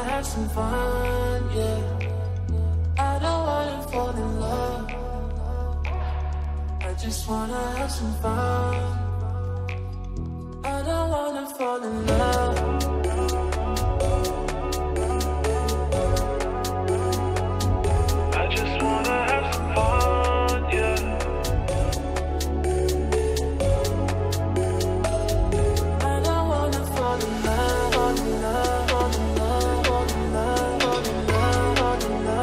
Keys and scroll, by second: 21.2 space, 31.8 space.